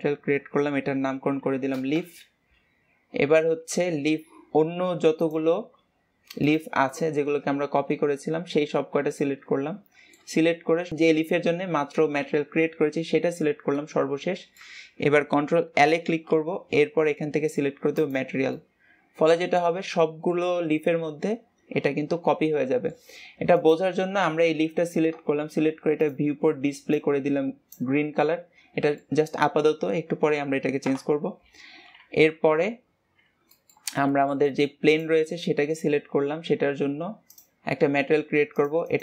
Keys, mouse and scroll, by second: 3.9 ctrl+s, 5.2-7.0 drag, 7.1-10.9 middle drag, 10.9 shift+click, 13.8-15.8 middle drag, 15.8 ctrl+l, 18.5-23.5 middle drag, 23.5-26.0 drag, 28.2-30.8 middle drag, 30.8 KP_0, 32.2 ctrl+s, 33.5 middle click, 33.8 scroll down 2, 34.0-34.8 middle drag, 34.8 click, 35.2-35.6 scroll down 3, 35.6-36.8 scroll up 3, 36.8-37.2 scroll up 7, 37.2-39.0 drag.